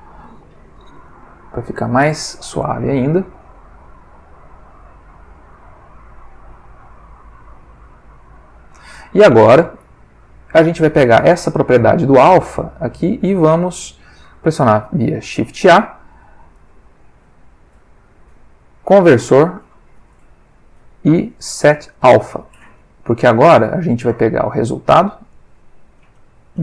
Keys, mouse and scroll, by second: 0.7 1, 0.8 Return, 3.8 click, 4.6 click, 5.4 click, 6.0 click, 9.9 click, 10.8 ctrl+middle click, 12.2 middle click, 13.2 click, 14.2 shift+a, 22.6 click, 25.3 click, 26.3 click.